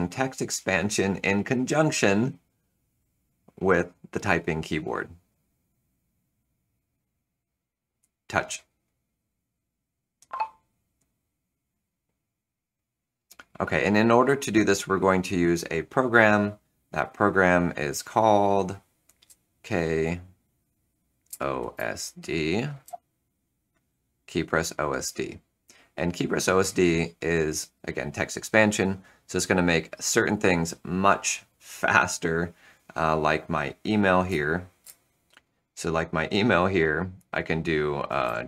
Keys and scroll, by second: 17.8 space, 19.1 h, 19.8 k, 21.0-22.8 typing, 34.2 space, 34.7 Return, 37.9-38.4 typing.